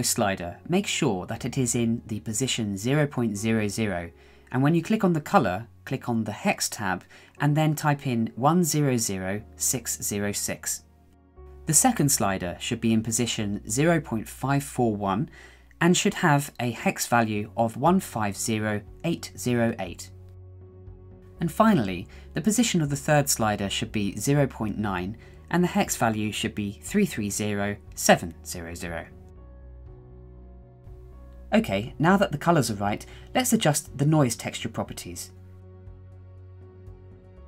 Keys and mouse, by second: 4.2 0, 11.4 right click, 22.5 click, 26.8 3, 28.6 0, 30.1 middle click, 31.2 middle click, 31.8 middle click, 32.3-34.1 middle drag, 34.4 KP_1, 35.8-37.4 drag.